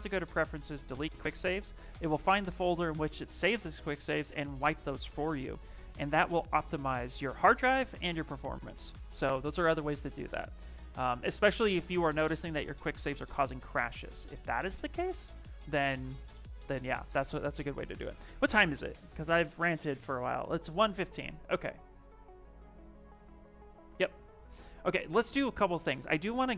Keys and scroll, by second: 24.9 s.